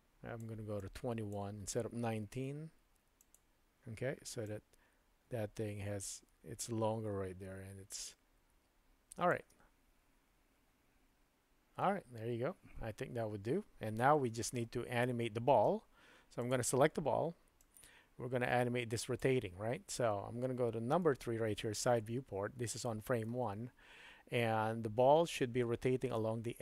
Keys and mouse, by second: 0.8-1.3 drag, 2.5 g, 4.5-9.4 drag, 9.5 space, 15.6 space, 16.4 click, 17.7-19.3 drag, 21.1 KP_3, 22.7-23.4 shift+middle drag.